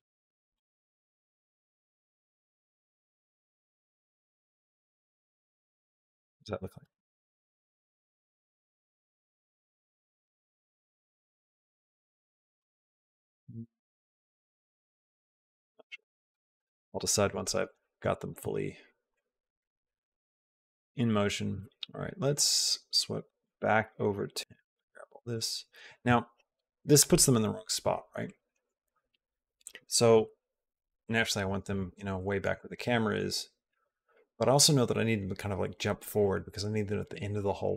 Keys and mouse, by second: 0.6 g, 4.0 g, 6.3 click, 6.6 space, 12.7 space, 14.2 ctrl+z, 14.4 ctrl+z, 14.7 ctrl+z, 14.8 ctrl+z, 15.4 ctrl+z, 15.8 ctrl+z, 16.1 ctrl+z, 18.9 click, 19.3 click, 19.7 click, 20.1 click, 20.5 click, 21.0 click, 22.2 click, 23.5 click, 24.5 click, 31.9 shift+middle click, 32.6 shift+middle click, 33.5 shift+middle click.